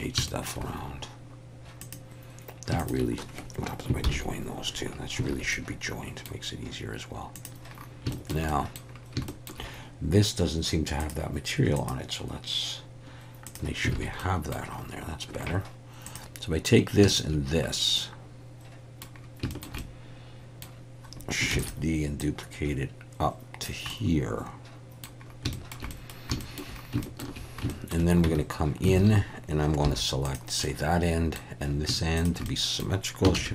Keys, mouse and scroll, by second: 0.3 shift+middle click, 1.8 click, 4.0 ctrl+j, 5.3 alt+a, 5.5 middle click, 8.1 shift+middle click, 8.5 middle click, 9.3 shift+middle click, 11.0 click, 11.8-13.6 drag, 14.0 alt+a, 14.2 middle click, 16.1 click, 18.0-19.0 middle drag, 19.5 shift+middle click, 19.8 middle click, 21.6 shift+d, 22.2-23.7 drag, 24.0-25.1 middle drag, 25.6 shift+middle click, 26.0 middle click, 26.5 shift+click, 27.1 shift+click, 27.8 shift+click, 28.4 Tab, 29.0 alt+a, 29.8 3, 30.6 middle click, 32.2 shift+click, 32.5 middle click, 33.4 shift+s.